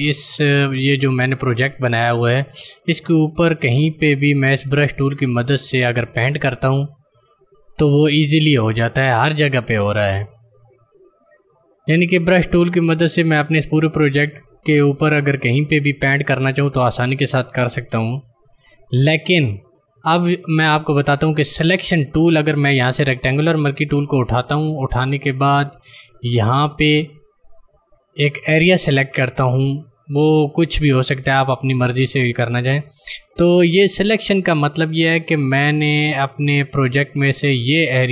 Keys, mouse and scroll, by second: 3.9 click, 19.0 ctrl+alt+z, 22.1 click, 26.4 click.